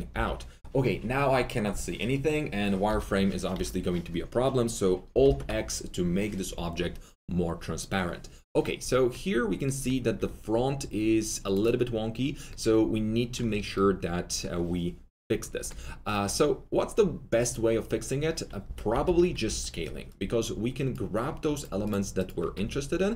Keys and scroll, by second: 0.1 F3, 2.8 F4, 3.5 F4, 5.2 alt+x, 10.1 2, 12.6 2, 18.6-19.4 typing, 21.3 typing.